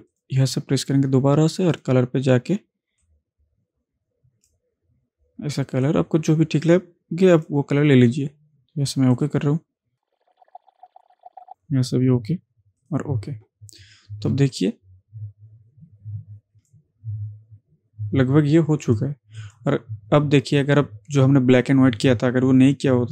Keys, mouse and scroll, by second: 11.0 click, 11.6 click, 14.4 ctrl+space, 14.6 ctrl+click, 14.9-16.7 ctrl+space, 16.0 ctrl+space, 18.9 click.